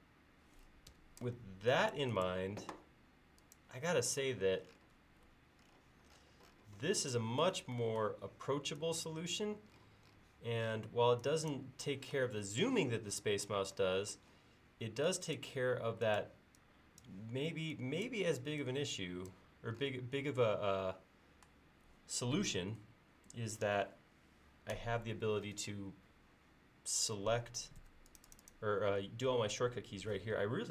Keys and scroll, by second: 1.0 Escape, 27.9 space.